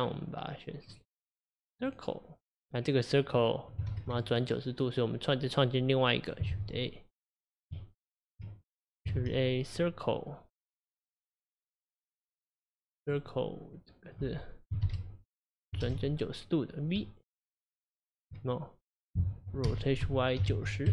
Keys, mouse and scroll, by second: 0.9 click, 3.9 ctrl+z, 4.3 click, 5.5 click, 6.5 shift+a, 7.2 click, 7.8 Tab, 8.9 click, 9.2 shift+a, 13.2-16.2 drag, 17.5 Tab, 19.7 r.